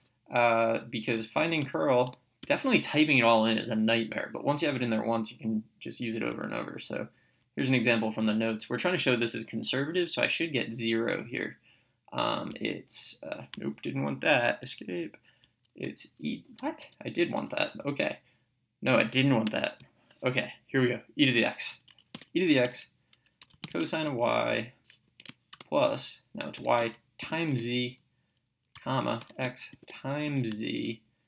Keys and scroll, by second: 0.9-2.4 typing, 7.5 (, 14.4 Escape, 16.6 BackSpace, 22.2 x, 22.7 Right, 23.2-24.7 typing, 25.1 Right, 26.6-30.3 typing.